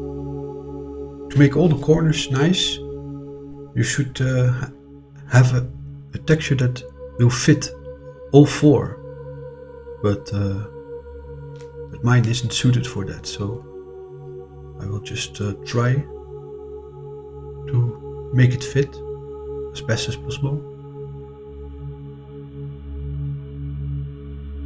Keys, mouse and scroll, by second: 4.7 Return, 6.8 scroll down 2, 12.6 click, 15.3-17.0 drag, 18.5 click, 21.0-24.6 drag.